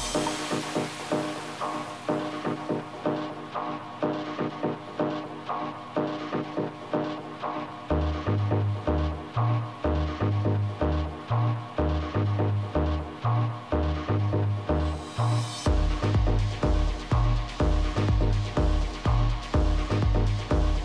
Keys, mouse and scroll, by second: 3.5 a, 6.8 b, 8.8-10.7 drag, 12.0 a, 12.3 middle click, 12.9-16.4 middle drag, 13.6 z, 18.7 ctrl+z, 19.2 ctrl+z, 19.6 ctrl+z, 20.0 ctrl+z, 20.4 ctrl+z.